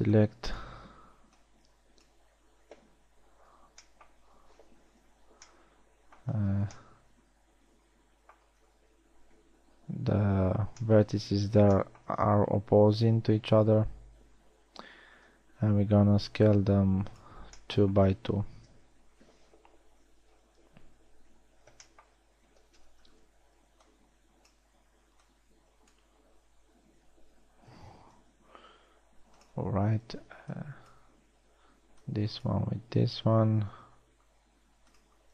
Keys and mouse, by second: 0.5 b, 1.6 b, 4.1 b, 5.8 z, 12.4 shift+middle drag, 13.5 s, 19.8 KP_1, 21.0 KP_3, 22.8 a, 23.6 z, 24.1 b, 25.7 b, 28.6 s, 30.6 a, 31.1 b, 32.0 b, 34.3 s.